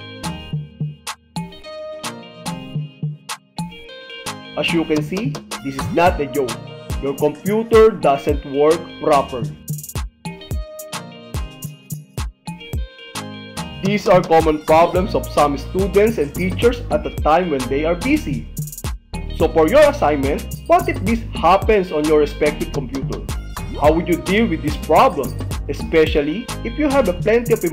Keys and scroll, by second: 0.9 Return.